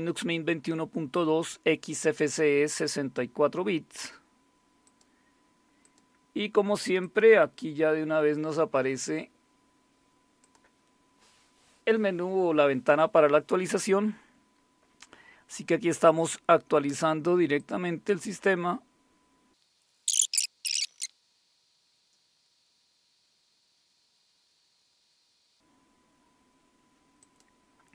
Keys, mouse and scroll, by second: 4.9 click, 5.8 click, 7.0 click, 10.4 click, 17.6 click, 18.5 click, 20.3 click, 20.5 click, 20.6-21.5 typing, 21.8 scroll down 1, 25.0 click, 27.2 click.